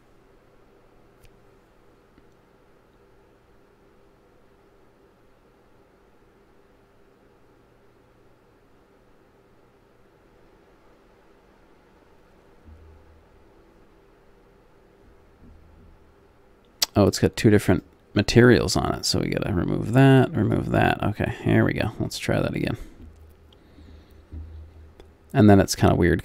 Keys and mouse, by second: 17.7-26.2 drag.